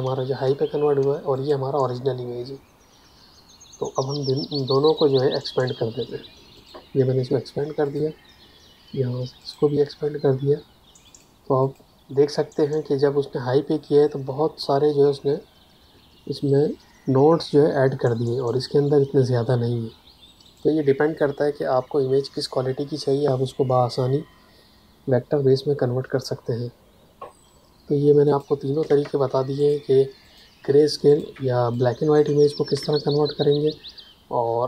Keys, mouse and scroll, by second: 4.5 click, 5.1 Tab, 6.5 click, 18.4 click, 28.2 click, 28.8 space, 29.5 ctrl+alt+click, 30.2 ctrl+alt+click, 31.0 ctrl+alt+click, 31.7 click, 32.7 space.